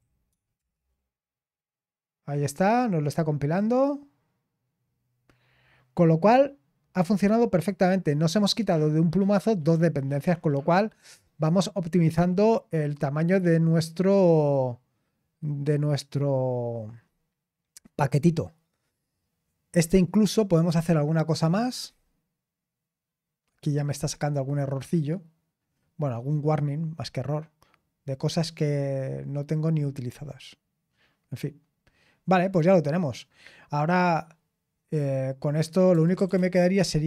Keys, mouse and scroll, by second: 0.0-0.5 typing.